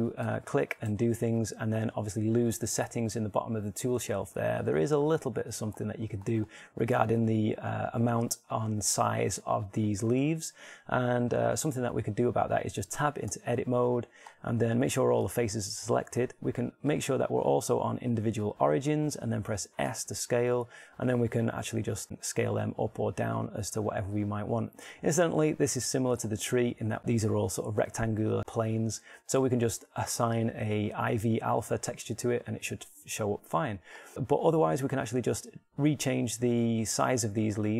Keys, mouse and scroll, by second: 1.1 Tab, 1.6 Tab, 2.4-4.1 right drag, 4.1-7.8 middle drag, 14.0 Tab, 17.6 click, 20.8 s, 26.2 click.